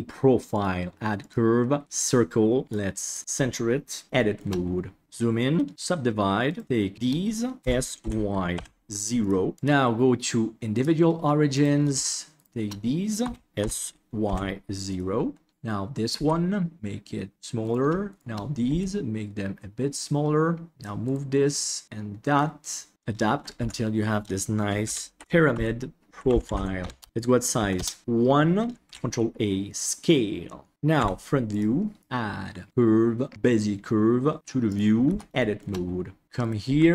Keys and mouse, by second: 0.6-1.8 drag, 2.6 click, 5.0 Tab, 5.7 w, 6.4 right click, 6.9 shift+right click, 7.6 s, 9.6-10.8 drag, 11.5 right click, 12.3 shift+right click, 13.2 s, 16.1 s, 17.6 right click, 18.0 shift+right click, 18.6 s, 20.7 click, 21.5 click, 22.9 Tab, 23.5 F2, 25.2 shift+BackSpace, 27.1 click, 28.8 ctrl+a, 30.9 KP_1, 32.0-33.3 drag, 34.3 click, 35.0 Tab, 35.3 shift+click, 36.2 e, 36.3 click, 36.6 g.